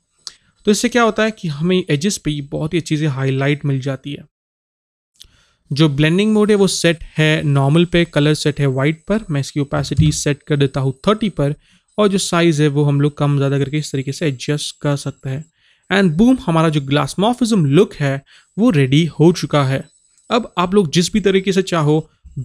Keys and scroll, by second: 9.9 KP_3.